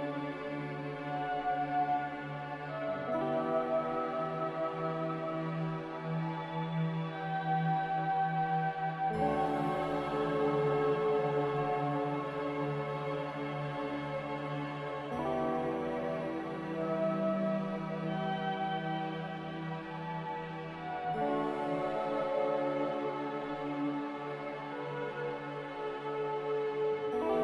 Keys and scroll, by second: 2.7 2, 7.9 ctrl+c, 8.0 ctrl+v, 25.5 n.